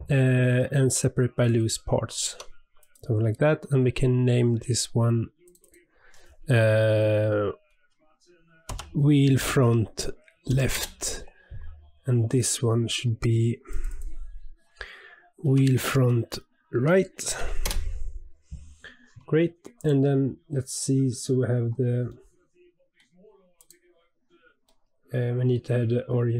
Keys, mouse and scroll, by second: 2.3 Tab, 2.7 click, 5.4 click, 5.6-8.7 drag, 12.3 click, 13.7 click, 13.9-17.0 drag, 19.7 click, 22.1-23.5 middle drag, 23.5 click, 24.6-26.3 middle drag.